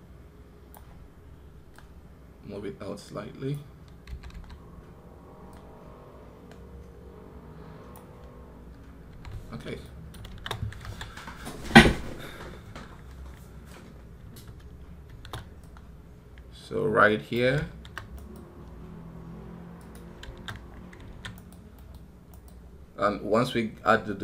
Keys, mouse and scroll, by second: 18.0 right click, 21.2 right click, 22.1 right click.